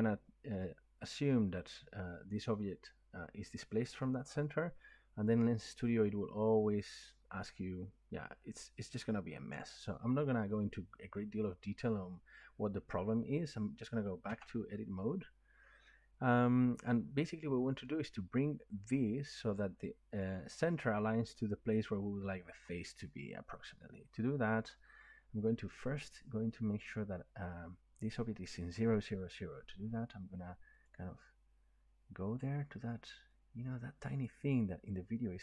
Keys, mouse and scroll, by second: 14.3 Tab, 17.8 middle click, 19.5-23.0 middle drag, 30.9 click, 34.2 click.